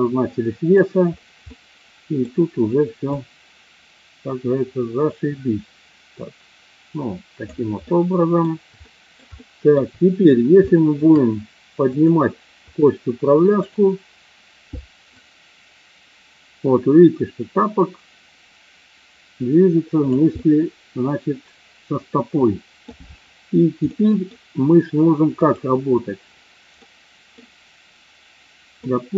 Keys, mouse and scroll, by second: 1.5-2.4 middle drag, 3.1-7.5 drag, 7.8 middle click, 8.8 shift+middle click, 9.4 middle click, 10.7 shift+middle click, 12.0 click, 13.5 click, 15.0-20.0 drag, 20.3 scroll up 1, 20.5-22.9 middle drag, 23.9 scroll up 1, 24.1 middle click, 25.4 click, 26.8 middle click, 28.8 scroll up 2, 28.9-29.1 middle drag.